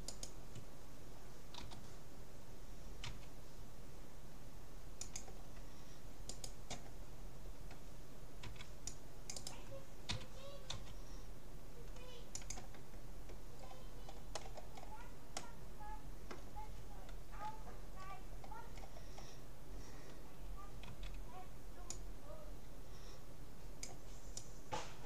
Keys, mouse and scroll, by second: 1.6 g, 6.4-8.0 right drag, 8.4 c, 9.6-11.2 right drag, 10.2 g, 13.6-15.0 middle drag, 15.4-16.4 middle drag, 17.6-19.2 middle drag, 18.0-19.2 scroll down 1, 19.2 scroll up 1, 19.4-21.0 middle drag, 21.0 c.